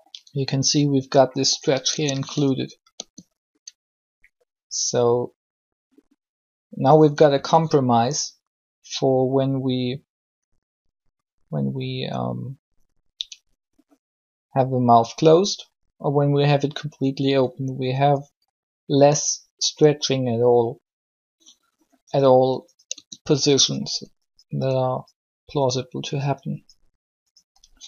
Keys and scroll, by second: 1.9 Tab, 2.9 r, 7.2 r, 22.7 Tab.